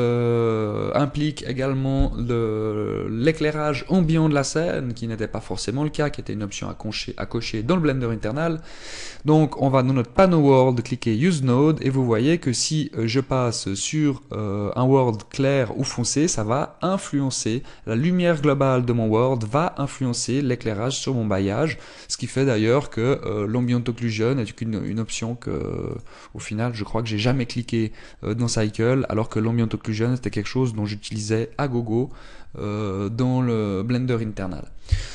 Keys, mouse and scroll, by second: 11.6 click, 12.6 click, 24.5 click, 25.9 click, 26.8 click.